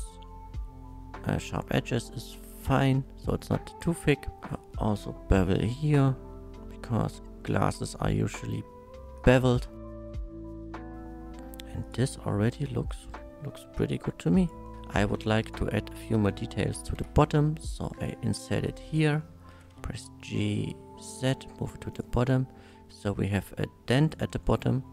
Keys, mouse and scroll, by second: 2.6 shift+click, 4.5 middle click, 5.3 ctrl+b, 9.2 click, 9.7 middle click, 10.3 Tab, 10.3-10.6 middle drag, 10.7 middle click, 11.8 click, 13.2 middle click, 13.8 alt+z, 14.4 click, 14.6 middle click, 14.7 Tab, 14.9 middle click, 15.1 middle click, 15.3 3, 15.5 click, 15.9 middle click, 17.0 i, 18.8 click, 19.2 middle click, 19.5 g, 19.7 z, 21.9 shift+click, 22.3 shift+middle drag, 22.6 Tab, 22.9-24.0 middle drag, 24.6 middle click.